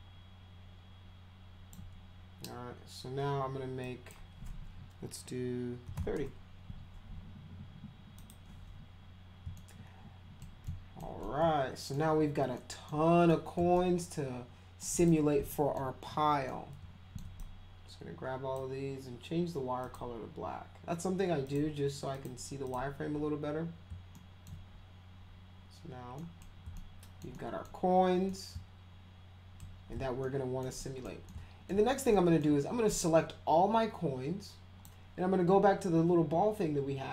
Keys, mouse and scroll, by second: 3.8 click, 5.6-6.4 typing, 8.1 click, 9.6 alt+middle click, 10.6 alt+middle click, 11.2 alt+middle click, 12.6 middle drag, 13.3 middle click, 13.7-14.8 alt+middle drag, 15.0 click, 15.5 middle drag, 16.4-17.1 middle drag, 17.4-18.6 drag, 19.8 click, 21.5 click, 22.1 click, 22.6 click, 24.1 alt+middle click, 25.2 scroll down 2, 26.0-26.7 scroll down 4, 26.1 middle click, 26.8 alt+middle click, 27.3 middle click, 28.3-29.6 alt+middle drag, 30.2 alt+middle click, 30.8 middle drag, 31.3 alt+middle click, 32.1 alt+middle click, 32.9-34.8 drag.